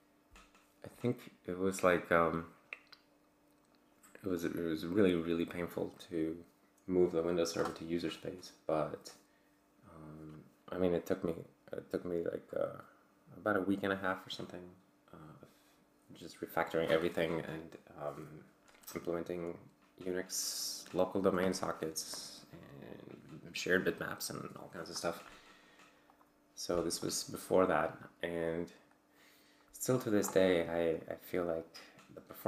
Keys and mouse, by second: 4.4 click, 26.1 click, 27.0-29.3 drag, 30.0 click, 30.5-32.4 drag.